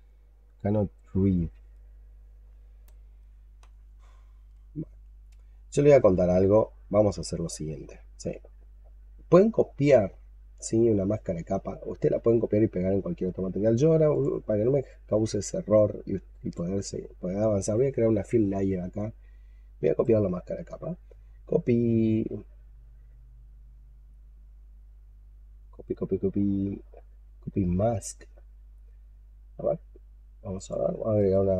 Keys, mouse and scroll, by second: 19.7 right click, 31.0 right click.